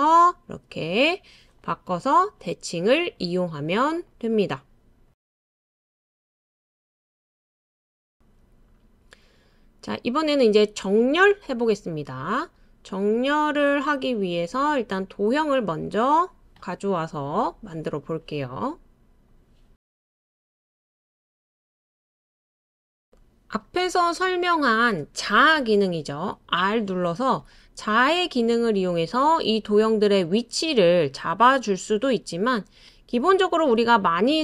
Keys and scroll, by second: 7.0 \, 7.0 BackSpace, 13.4 super+c, 13.5 super+v, 27.5 r.